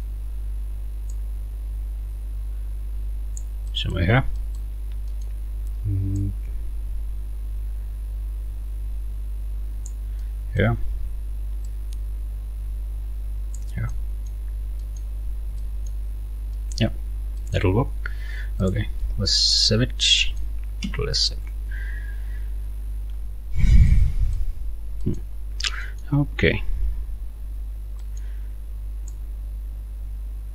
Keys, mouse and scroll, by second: 1.1-3.6 drag, 3.7 right click, 4.1 scroll down 2, 4.4 middle click, 4.7 scroll down 2, 5.1 middle click, 6.2-7.7 drag, 7.7-10.1 middle drag, 10.2 right click, 11.7-13.8 drag, 13.9 click, 14.6 scroll down 1, 14.8 click, 16.5 click, 16.9 scroll down 2, 17.4 click, 18.6 click, 20.2 ctrl+click, 20.8 ctrl+s, 22.3 scroll up 1, 23.9 click, 25.0 middle click, 25.4 scroll up 2, 25.8 middle click, 25.9-26.2 scroll up 2, 26.7 ctrl+t, 27.7 scroll up 2, 28.0 middle click, 29.1-30.5 middle drag.